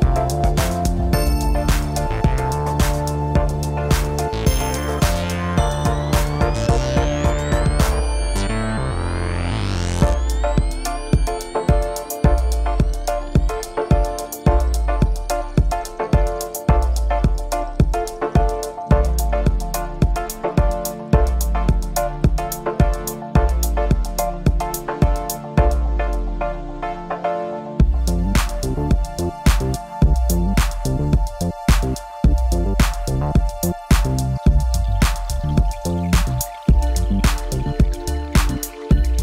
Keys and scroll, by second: 1.1 ctrl+i.